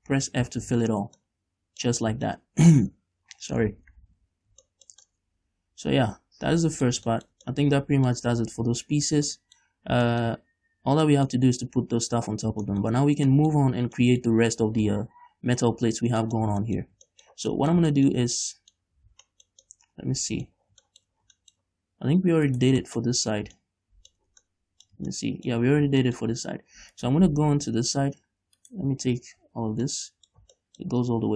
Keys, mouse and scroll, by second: 0.5 f, 1.1 scroll down 1, 1.2 Tab, 1.4 middle click, 2.2 a, 2.5-4.6 middle drag, 4.6 scroll down 2, 4.8-9.9 shift+middle drag, 9.9-10.3 scroll up 2, 10.3-21.1 shift+middle drag, 11.6-12.5 scroll up 2, 12.5 scroll up 1, 12.7 scroll down 2, 16.1-16.5 scroll up 3, 19.1-19.5 scroll up 2, 20.9 scroll down 1, 21.4 scroll down 2, 21.8-22.7 scroll up 2, 22.7 right click, 23.0 shift+middle click, 23.3-23.8 scroll up 2, 23.8 shift+middle click, 25.3 ctrl+middle click, 26.0-26.3 scroll down 1, 26.3 shift+middle click, 26.6-27.2 scroll up 1, 27.2 right click, 27.6 Tab, 28.8 right click, 29.6 l, 29.8 scroll down 2, 30.1-31.2 middle drag, 31.2-31.3 scroll up 2.